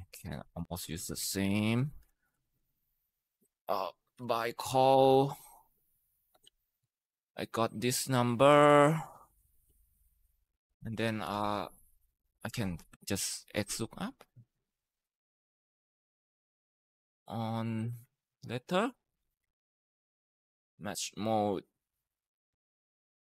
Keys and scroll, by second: 0.9 ctrl+c, 1.3 Escape, 2.2 ctrl+v, 3.4-4.9 typing, 6.1 BackSpace, 6.6 Return, 6.9 Up, 10.8-11.7 typing, 12.3 Escape, 12.7 Escape, 13.7-14.7 typing, 18.1 ctrl+shift+Right, 18.9-20.6 typing, 22.3 Tab, 23.2 BackSpace.